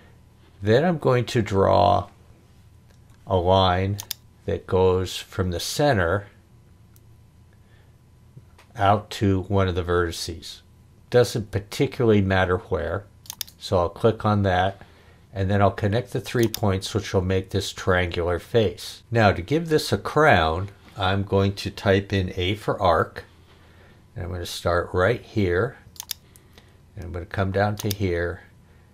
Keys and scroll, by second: 2.9 Escape, 22.8 a.